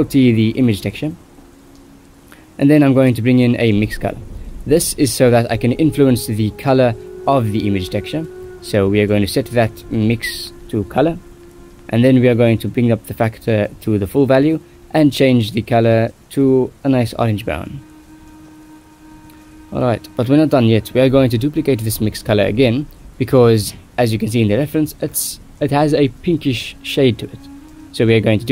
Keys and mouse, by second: 0.4 middle click, 1.6 click, 1.6 right click, 2.7 click, 2.7 right click, 3.2 click, 3.8 g, 4.6 click, 4.7 right click, 5.0 ctrl+s, 5.4 click, 7.0 shift+a, 10.9-13.9 drag, 14.8 middle click, 16.2 click, 27.5 middle click, 28.1 middle click.